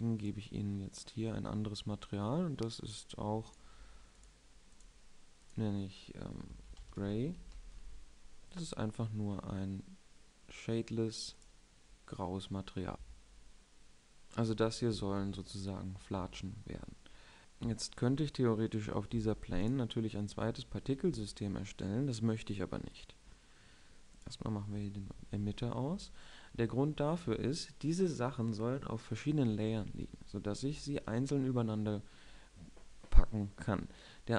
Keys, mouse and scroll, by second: 11.7-13.7 drag, 17.1 middle drag, 17.1 click, 24.8-28.0 middle drag.